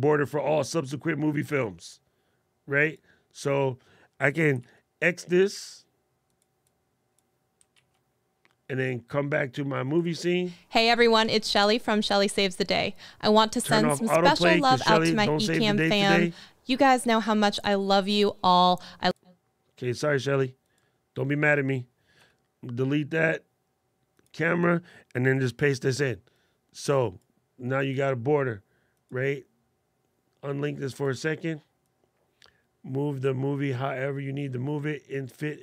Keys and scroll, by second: 4.4 super+x, 7.5 super+x, 25.2 super+v.